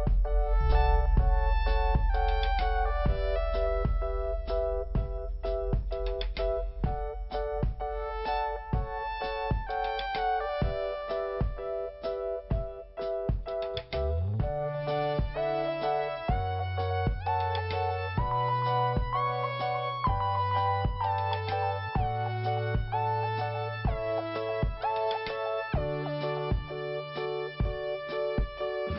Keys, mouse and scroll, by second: 0.4 p, 1.3 click, 2.2 scroll down 1, 4.0-4.4 scroll up 2, 5.1 click, 7.2 click, 8.2 click, 9.2 click, 15.5 scroll down 1, 16.3 click, 18.5 scroll up 1, 19.5 click, 19.6 click, 20.4 click, 20.5 click, 20.7 right click, 21.5 click, 22.5 click, 23.7 click, 25.0 click, 27.0 click, 27.7 click.